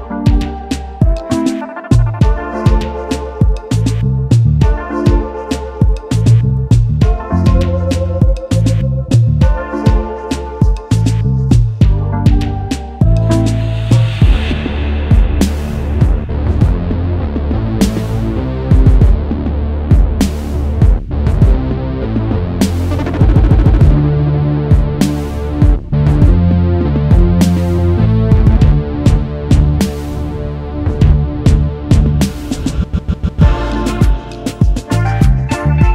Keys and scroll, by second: 10.1-11.4 typing, 15.8-17.2 typing, 24.0 Delete, 25.1 ctrl+s.